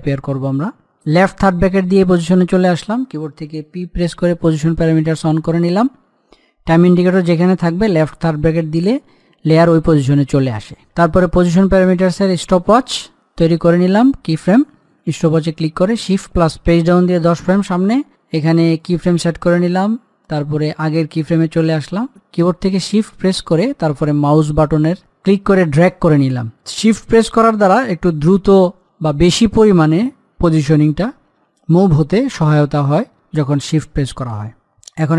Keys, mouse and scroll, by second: 1.6 i, 4.4 p, 11.6 click, 16.0 click, 17.0 shift+Page_Down, 19.1-32.8 drag, 34.9 click.